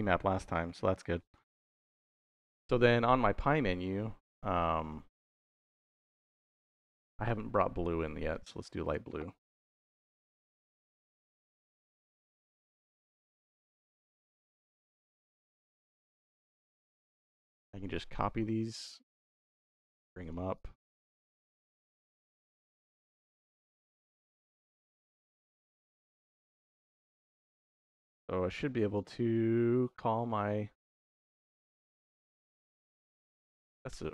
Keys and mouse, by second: 0.5 middle click, 1.2 middle click, 1.8 click, 3.7 middle click, 4.8 middle click, 6.0 click, 6.7 shift+d, 7.0 y, 7.6 click, 7.9 middle click, 8.7-11.9 drag, 12.1-14.1 drag, 15.4-16.5 drag, 16.9 middle click, 17.5 click, 19.0 shift+d, 19.2 y, 20.1 click, 20.4 click, 21.0 click, 22.6 click, 24.2-25.2 drag, 25.9 click, 26.7 middle click, 28.8 ctrl+s, 29.8 shift+y.